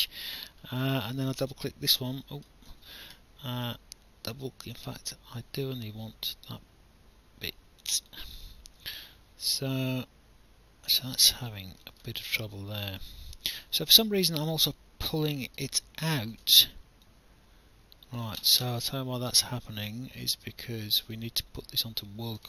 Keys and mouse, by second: 1.4 click, 2.7 ctrl+z, 7.8 click, 12.2 alt+click, 16.2 ctrl+z, 17.1 alt+click, 19.0 alt+click.